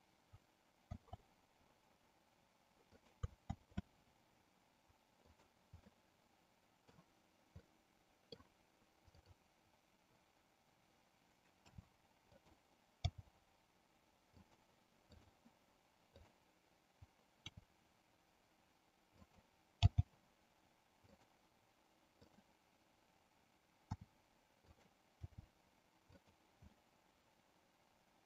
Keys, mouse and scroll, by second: 1.1 shift+d, 5.4 click, 5.9-7.1 middle drag, 7.7 middle click, 9.2 click, 11.7 r, 13.2 g, 14.4 click, 15.2 click, 16.3 click, 17.6 r, 19.9 g, 22.2 click, 23.9 r, 24.8 click, 25.3 g, 26.9-28.2 middle drag.